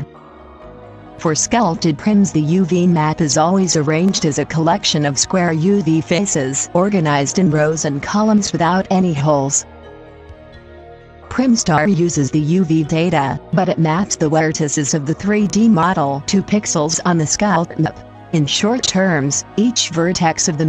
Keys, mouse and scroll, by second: 2.2-4.2 middle drag.